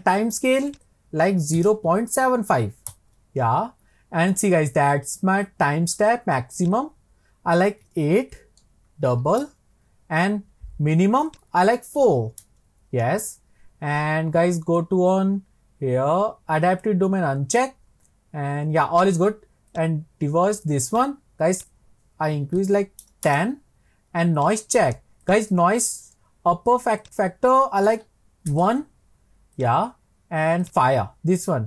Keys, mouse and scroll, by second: 0.7-3.7 drag, 6.6-9.6 drag, 11.3-13.6 drag, 13.6-14.8 scroll down 10, 14.8-16.2 scroll down 2, 16.2-17.8 scroll down 1, 19.8 click, 20.9-24.6 drag, 25.2-31.6 drag.